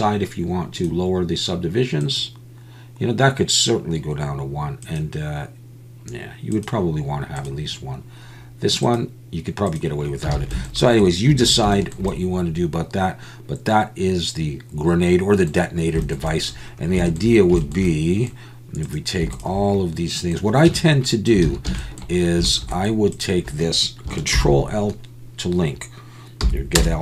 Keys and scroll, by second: 10.3 alt+a, 11.4 ctrl+s, 20.8 Tab, 21.5 alt+a, 24.3 ctrl+l, 26.4 p.